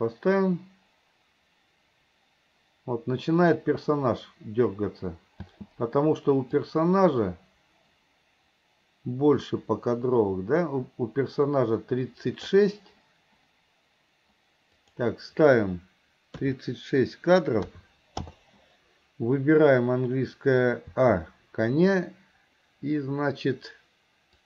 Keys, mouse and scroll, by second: 5.5 space, 6.7-12.7 drag, 14.8-18.4 drag, 21.0 a.